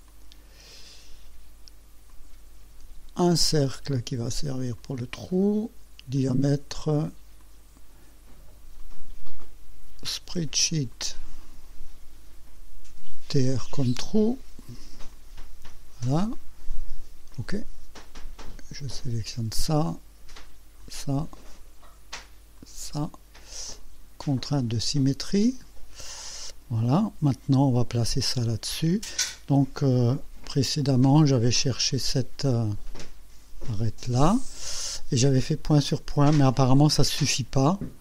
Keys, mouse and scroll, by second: 0.1 click, 2.1 click, 3.9 click, 4.8 click, 5.3 right click, 6.2 click, 7.5 click, 8.8 click, 10.3 s, 11.0 click, 12.5 t, 12.9 r, 14.7 click, 15.2 click, 17.4 click, 19.3 click, 20.9 click, 22.6 click, 24.6 click, 32.0 click, 33.7 click.